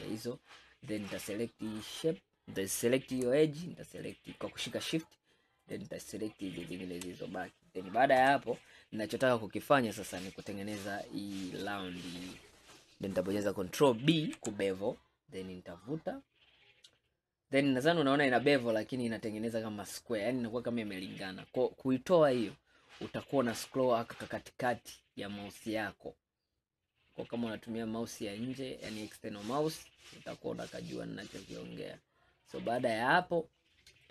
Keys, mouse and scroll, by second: 0.6-1.7 middle drag, 1.7 click, 4.1 shift+click, 5.7 shift+click, 6.7 shift+click, 8.3 KP_1, 14.2 ctrl+b, 33.7-34.1 scroll down 1.